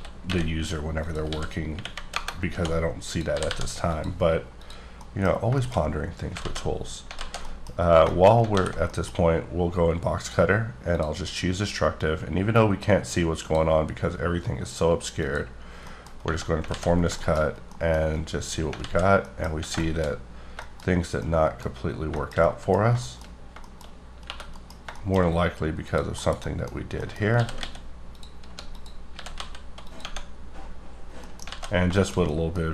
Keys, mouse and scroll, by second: 0.0-3.5 typing, 1.0 click, 2.1 KP_Enter, 3.0 click, 3.9 click, 4.5 click, 5.0 middle click, 5.3 scroll down 2, 5.5 shift+middle click, 5.8-6.3 scroll up 1, 6.4 alt+z, 6.6-7.0 scroll down 1, 7.1 alt+z, 7.4 middle click, 7.8 scroll up 2, 8.3 middle click, 8.4 alt+w, 8.9 middle click, 10.1 click, 10.8 click, 12.0 click, 15.2 click, 15.6-17.5 scroll down 11, 15.8 middle click, 16.7 alt+z, 17.2 middle click, 17.7 middle click, 18.0-18.4 scroll up 4, 18.8 alt+z, 19.2 middle click, 19.9 shift+middle click, 20.1-20.6 scroll up 5, 20.6 middle click, 21.1 middle click, 21.7 scroll up 2, 22.1 shift+middle click, 22.8-23.9 scroll up 6, 23.0 shift+middle click, 23.5 shift+middle click, 24.2 3, 24.3 middle click, 25.2-25.8 scroll down 3, 25.8 click, 26.1 KP_Decimal, 26.4 middle click, 26.6 scroll down 5, 26.9-27.3 scroll up 2, 27.0 middle click, 27.3-29.4 typing, 28.1 click, 28.7 click, 29.8 click, 30.0 Tab, 30.2-31.1 scroll down 9, 31.1 middle click, 31.5 alt+z, 31.8 shift+scroll down 2, 31.8 shift+scroll up 1, 31.9 shift+middle click, 32.6 scroll up 2.